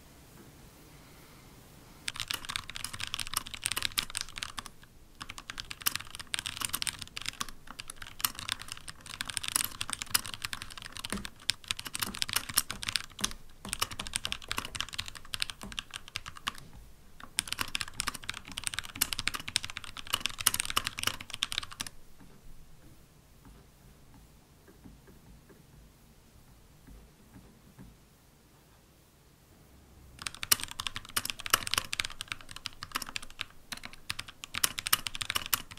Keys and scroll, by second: 11.0 super+Left, 11.9 super+Right, 12.6 super+Left, 13.5 super+Left, 32.2 super+,.